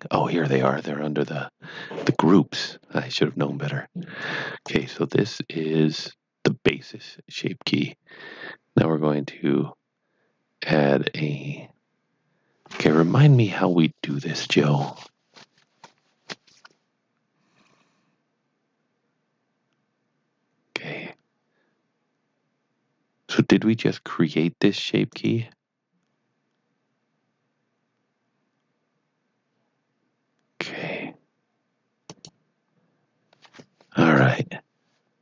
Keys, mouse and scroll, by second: 4.6 click, 25.2 right click, 32.0 click.